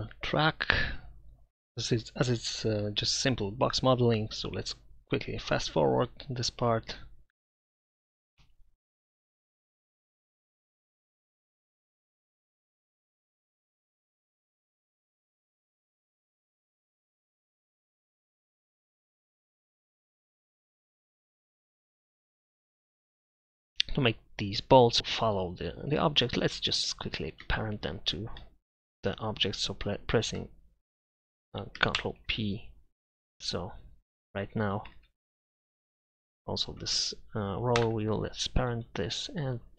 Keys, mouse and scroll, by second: 0.2 shift+d, 0.7 Tab, 0.9 ctrl+r, 1.9 e, 2.2 Tab, 3.3-7.3 typing, 4.8 click, 6.9 Tab, 8.4 s, 9.4 e, 9.8 Tab, 10.8 right click, 10.9 Tab, 11.0 Tab, 11.1 Tab, 11.3 Tab, 11.5 ctrl+j, 12.8 w, 13.7 Tab, 14.4 KP_Divide, 14.5 z, 17.1 middle click, 17.8 r, 21.3 drag, 21.7 z, 21.8-22.3 drag, 22.3 KP_Divide, 22.8 z, 23.0 z, 23.4-24.1 right drag, 32.0 ctrl+p, 34.9 ctrl+z, 37.8 ctrl+p.